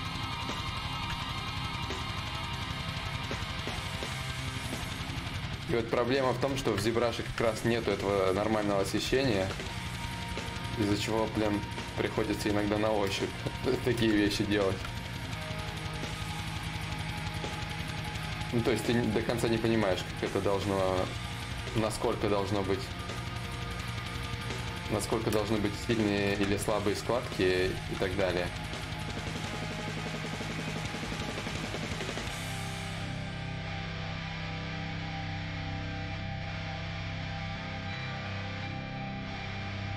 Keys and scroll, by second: 7.5 s, 19.1 s, 21.5 ctrl+z, 21.7 s, 23.0 ctrl+z, 24.8 Escape, 36.0 ctrl+z, 37.7 ctrl+z, 37.9 ctrl+z.